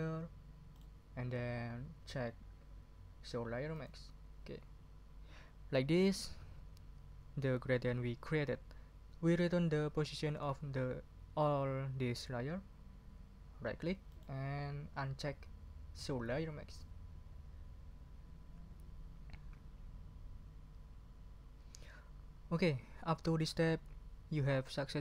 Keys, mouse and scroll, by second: 0.7 right click, 16.7 click.